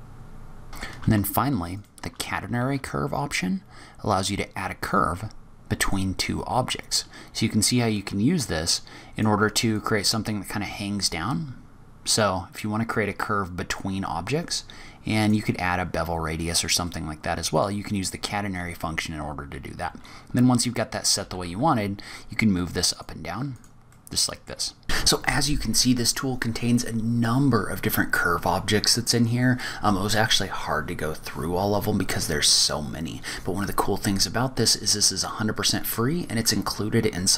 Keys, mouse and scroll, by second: 0.7 shift+middle click, 1.6 shift+click, 2.4 shift+a, 7.9 click, 9.6 click, 15.0 click, 16.2-16.7 scroll up 4, 16.7 middle click, 17.8-18.2 scroll down 4, 21.0 g, 23.4 click, 23.8 middle click, 24.6 scroll up 1.